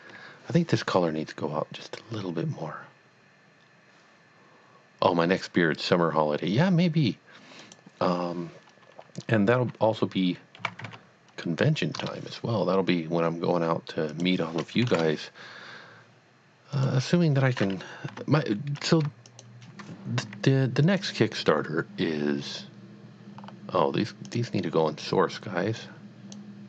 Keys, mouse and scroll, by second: 7.6 click, 7.7 click, 10.6 click, 10.7 KP_Decimal, 10.8 KP_5, 11.9 KP_Enter, 14.1 click, 15.0 KP_Enter, 16.7 click, 18.1 Tab, 18.8 click, 19.3 shift+click, 20.2 s, 20.8 click, 22.0 scroll down 1, 22.1 scroll up 1, 23.4 scroll up 1, 24.2 click, 24.7-25.0 scroll down 1, 25.8 click, 26.1 click, 26.4 click.